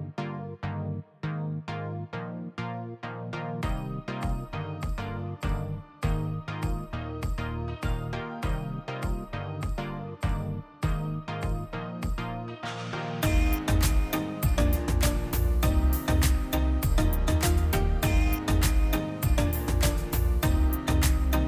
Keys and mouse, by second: 2.1-4.3 drag, 10.7-15.9 drag.